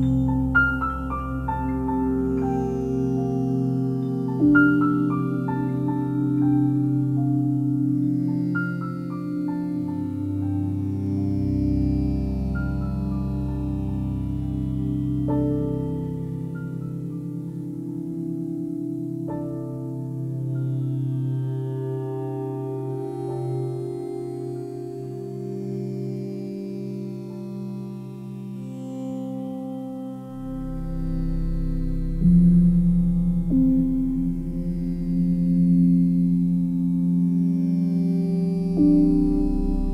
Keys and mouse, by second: 1.7 click, 3.2 click, 4.5 click, 5.0-8.1 alt+drag, 8.8 click, 9.4-13.5 alt+drag, 14.1 click, 15.0 alt+shift+click, 15.4 alt+click, 16.6 alt+click, 17.8-19.3 drag, 20.8 click, 22.1 click, 22.7 click, 23.2 click, 23.7 click, 23.8 typing, 26.0 typing, 27.3 typing, 28.9 click, 30.0-32.6 ctrl+alt+drag, 30.0 typing, 34.6 r, 35.3 y, 38.0 ctrl+click, 39.2 e.